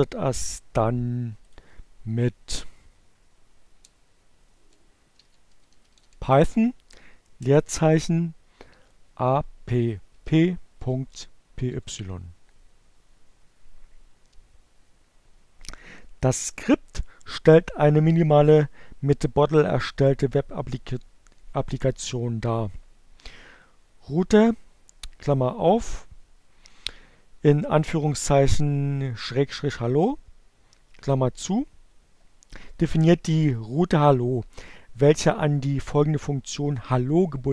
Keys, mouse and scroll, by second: 1.9 Down, 2.3 BackSpace, 4.1-5.5 typing, 6.9-7.7 typing, 8.9-10.3 typing.